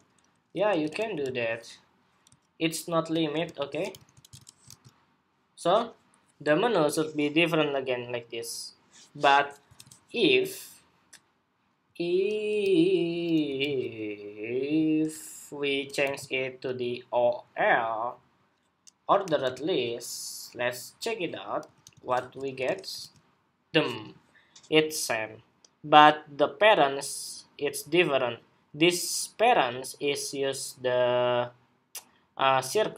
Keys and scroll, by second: 0.9 super+v, 3.7 super+s, 4.0 super+Tab, 4.4 super+r, 9.4 super+Tab, 13.3 super+c, 15.7 super+v, 21.9 super+s, 22.7 super+r.